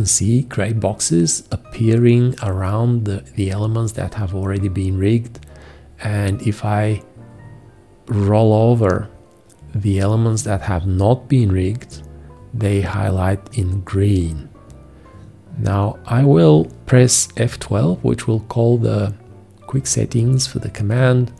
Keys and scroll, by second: 21.0 F12.